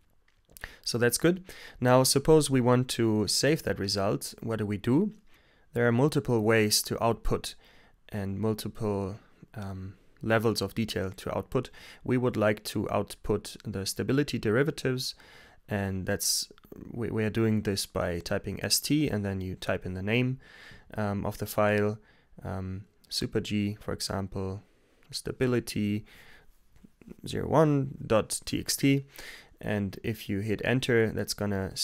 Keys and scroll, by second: 14.4-15.8 typing, 20.5-22.2 typing, 24.0-26.6 typing, 29.7-31.2 typing.